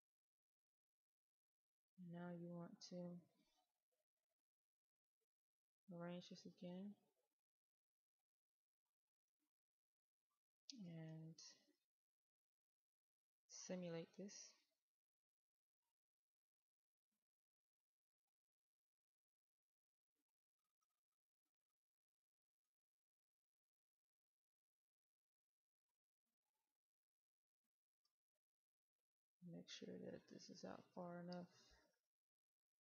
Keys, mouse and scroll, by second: 7.6-9.8 right drag, 9.8-10.3 scroll down 1, 10.3 middle click, 12.1-12.7 scroll down 1, 14.7 click, 18.6-19.2 scroll down 1, 19.2-20.1 scroll up 1, 20.1 right click, 21.3-21.8 scroll down 1, 21.8-24.4 middle drag, 24.4 right click, 28.0 click, 28.9 q, 32.3 click.